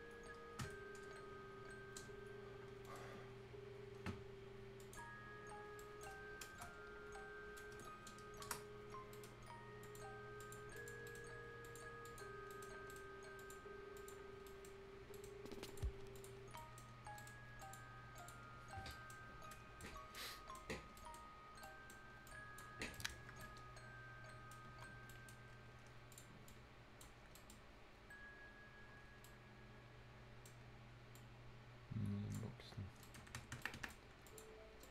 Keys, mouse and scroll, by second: 4.8 click, 5.8 right click, 8.5 Return, 9.1 right click, 9.8 click, 11.1 right click, 11.6 click, 12.3 scroll down 1, 12.5 right click, 12.8 scroll up 1, 12.9 right click, 13.4 click, 14.3-14.9 scroll down 2, 14.5 right click, 15.1 right click, 15.4 scroll up 1, 15.7 click, 16.4 scroll down 1, 16.6 right click, 17.0 scroll up 1, 17.2 right click, 17.6 click, 18.5 scroll down 1, 18.9 right click, 19.2 scroll up 1, 19.5 right click, 19.9 scroll up 1, 20.2 right click, 20.7 scroll up 1, 21.0 right click, 21.2 scroll down 1, 21.5 scroll up 1, 21.6 right click, 22.3 click, 22.8 scroll down 1, 22.9-24.7 right drag, 24.7 F10, 24.9 scroll up 1, 25.1 right click, 26.1 click, 27.2 scroll up 1, 27.4 right click, 29.0 scroll down 1, 29.2-30.6 right drag, 30.6 scroll up 1, 31.2-33.0 drag, 33.0 right click, 33.2 Escape, 33.5 scroll up 1, 33.6 Escape, 33.6 right click, 33.8 Escape, 34.0 scroll up 1, 34.3 click, 34.6 scroll down 1, 34.8 click.